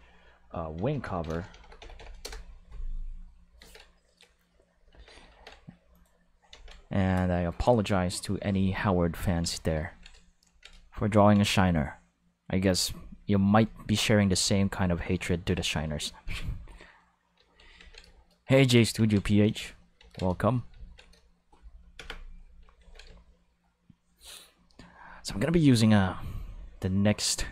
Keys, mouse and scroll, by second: 0.8-1.8 typing, 2.2 Return, 3.6 ctrl+s, 4.3 shift+middle click, 4.9 ctrl+s, 5.3 ctrl+Tab, 5.9 click, 6.5 ctrl+s, 13.5 click, 14.3 click, 14.6 click, 17.8 ctrl+s, 18.9 ctrl+s, 20.0 ctrl+s, 21.9 Home, 22.8 ctrl+s, 25.5 click.